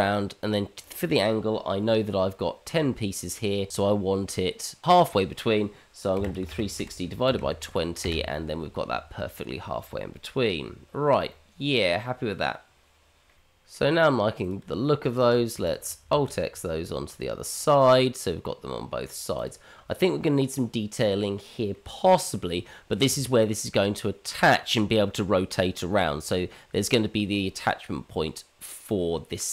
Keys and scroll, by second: 16.2 alt+x.